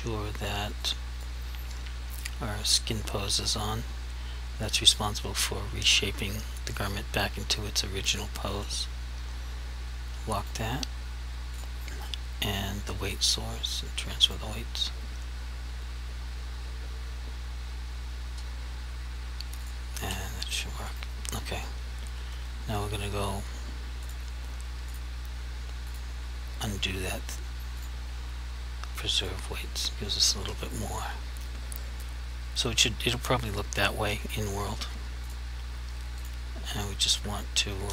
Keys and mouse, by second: 1.0 click, 10.5 click, 19.7 click, 20.0 r, 21.0 right click, 24.1 click, 35.3 click.